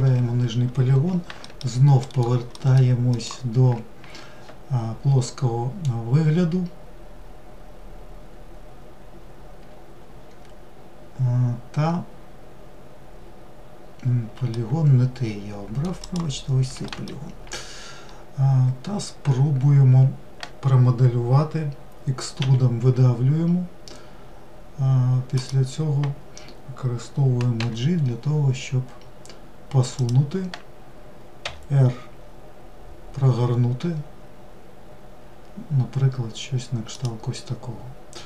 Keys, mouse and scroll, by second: 1.1 alt+middle click, 1.6 alt+middle drag, 14.2-15.7 middle drag, 15.7 click, 16.5 alt+middle drag.